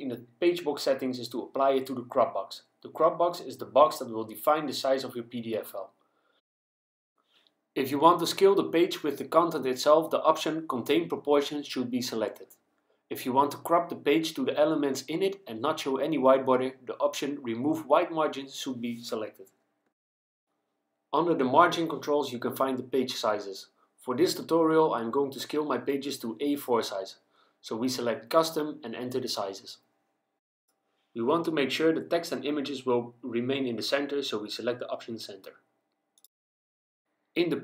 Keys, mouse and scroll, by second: 3.3 click, 7.1 click, 12.1 click, 17.6 click, 25.9 click, 28.7-29.9 typing, 30.7 Tab, 31.5 KP_2, 31.8 KP_1, 32.4 Tab, 34.7 click, 36.2 click.